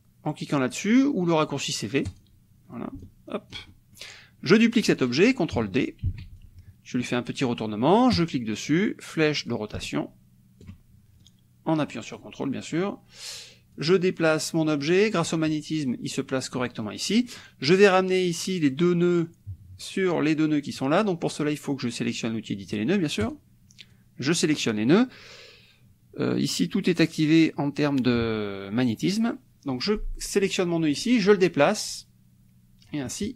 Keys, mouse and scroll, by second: 2.1 click, 3.0-4.2 ctrl+drag, 6.1 ctrl+d, 6.4-7.6 ctrl+drag, 8.1 click, 9.5-10.9 ctrl+drag, 11.2-12.4 drag, 13.8-15.4 drag, 16.8-23.3 middle drag, 23.3 click, 23.9 click, 30.9-33.1 drag, 33.1-33.3 middle drag.